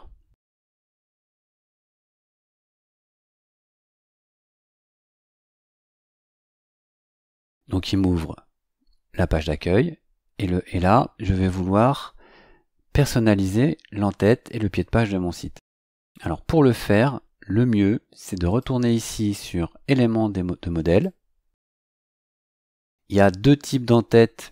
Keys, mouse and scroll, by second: 0.6 click, 18.5 click, 20.9 click.